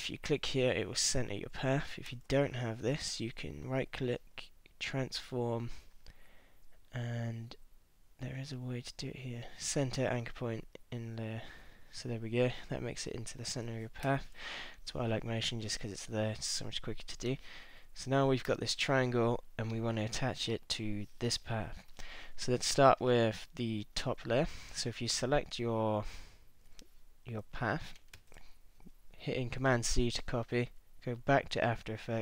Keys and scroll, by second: 3.1 super+z, 14.0 super+-, 17.6 super+-, 18.5 super+=, 28.1 super+c.